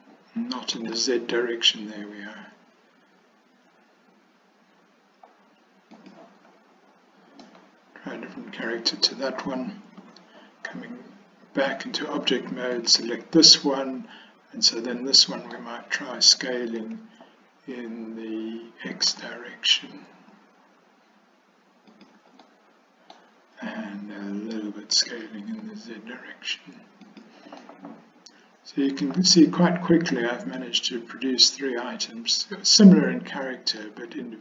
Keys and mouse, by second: 7.6-9.5 middle drag, 10.1 Tab, 12.9 click, 13.5-15.6 middle drag, 16.9 s, 22.5-23.2 middle drag, 25.0 s, 27.7-30.2 middle drag, 30.7-33.4 middle drag, 33.9-34.4 middle drag.